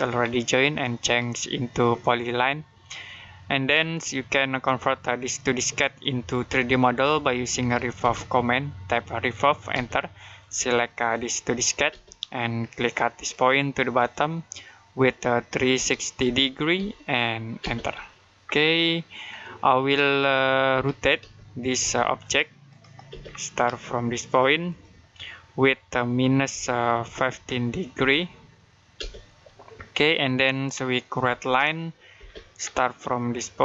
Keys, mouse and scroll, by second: 0.0-1.9 scroll up 1, 2.8 middle click, 3.8 Escape, 5.9 middle click, 6.3 middle click, 7.1-8.3 typing, 9.5 space, 11.7 space, 13.1 click, 15.6-17.4 typing, 18.3 scroll down 1, 18.6 middle click, 20.5-21.6 typing, 22.1 click, 22.9 space, 23.1 scroll up 1, 24.5 click, 26.9-28.8 typing, 29.6-30.0 scroll down 1, 30.0 middle click, 30.6-31.3 scroll up 1, 31.3 l, 32.0 space, 32.4-33.6 scroll up 1.